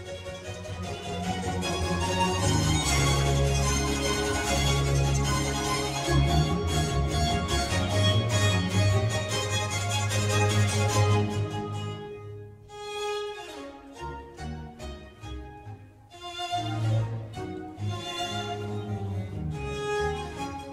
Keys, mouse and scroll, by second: 1.9 click, 2.8 Tab, 3.5-4.2 middle drag, 4.2 click, 5.4 g, 6.8 r, 9.9 Tab, 10.9-16.4 typing, 18.8-20.2 typing.